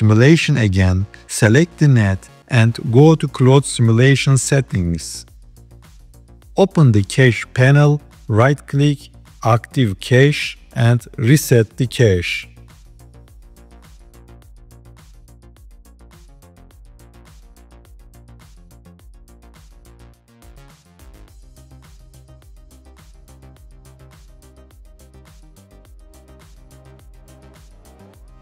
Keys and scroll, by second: 24.6 g.